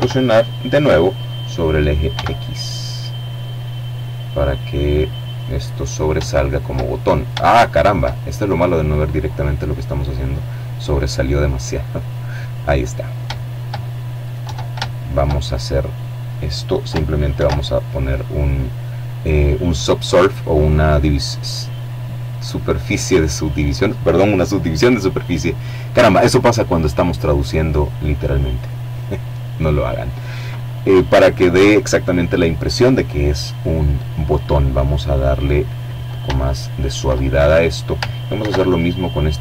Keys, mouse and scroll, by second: 0.2 x, 3.2 click, 4.4 shift+middle click, 5.0 shift+middle click, 5.6 shift+middle click, 7.0-10.6 drag, 10.5 middle click, 11.4 shift+middle click, 12.5 Tab, 12.9 shift+middle click, 15.4 ctrl+2, 16.2-16.8 scroll down 2, 33.5 click, 34.4-36.0 shift+middle drag, 36.4 ctrl+2, 37.2-37.8 scroll down 2, 37.8 middle click.